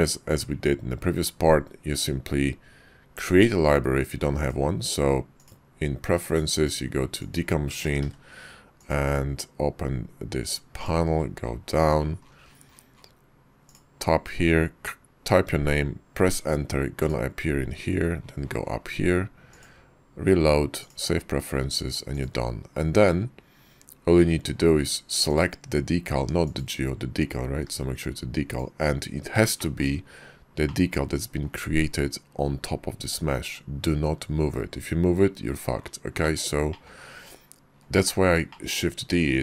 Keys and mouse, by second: 4.4-5.5 drag, 25.3 click, 26.5 click, 28.2 g, 29.6 shift+middle click, 30.7-31.5 middle drag, 36.3 middle click, 36.8 shift+middle click, 38.5 shift+middle click.